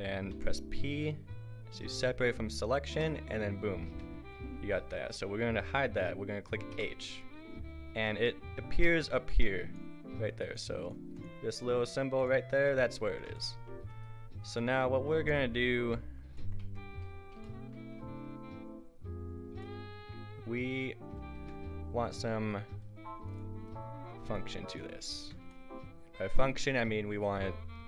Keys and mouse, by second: 0.3 p, 3.9 Tab, 4.6 z, 5.0-6.7 right drag, 6.7 h, 13.9 click, 15.8 KP_5, 16.6 Tab, 21.4 Tab, 22.1 Tab, 23.7 click, 25.2 Tab.